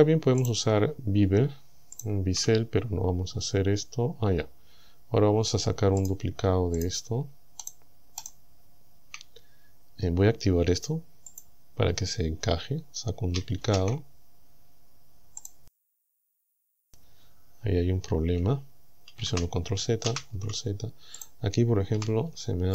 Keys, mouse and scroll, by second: 0.5 right click, 2.0 shift+right click, 5.2 scroll down 2, 6.1 right click, 6.3-8.4 shift+middle drag, 6.8 shift+right click, 7.7 shift+right click, 8.3 shift+right click, 11.3 click, 13.6 shift+d, 15.5 right click, 19.2 ctrl+z, 20.1 ctrl+z, 21.2 right click, 22.0 g.